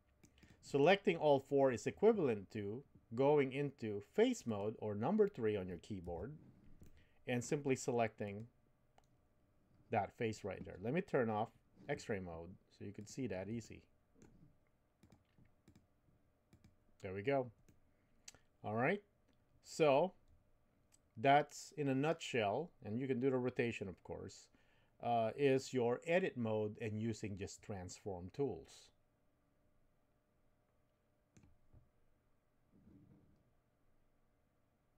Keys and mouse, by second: 4.5 click, 6.0 3, 6.8 middle click, 13.0 click, 13.6 middle click, 16.5 click, 17.6-32.1 middle drag.